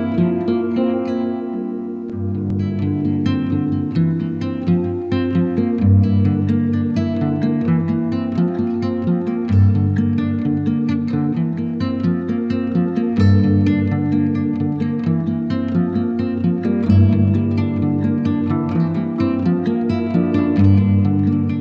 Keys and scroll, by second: 0.9 ], 2.9 [, 3.5 ], 4.2 space, 5.9 ], 9.1 ], 11.1 [, 11.9 z, 16.3 alt+d, 17.1 z, 19.2 [.